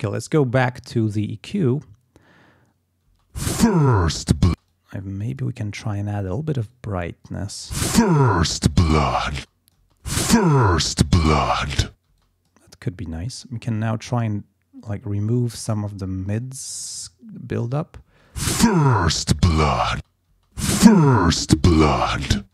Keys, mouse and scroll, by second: 0.1-1.8 drag, 3.1 space, 4.5 space, 4.7 click, 5.9 scroll up 1, 6.7 click, 7.4 space, 9.4 space, 9.5 click, 10.1 click, 12.1 space, 12.2 click, 13.3-15.9 drag, 15.9-16.4 scroll up 1, 16.4-17.3 scroll down 1, 17.5 scroll up 1, 17.8 scroll down 1, 18.1 space, 18.3-22.5 drag, 19.9 space.